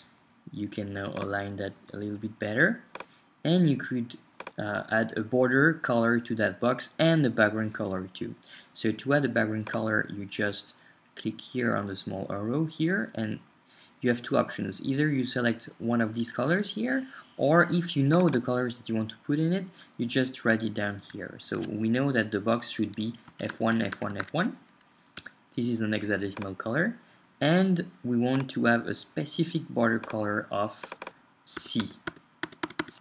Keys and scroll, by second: 0.0 Down, 23.3 typing, 25.1 typing, 25.2 Return, 31.6-33.0 typing.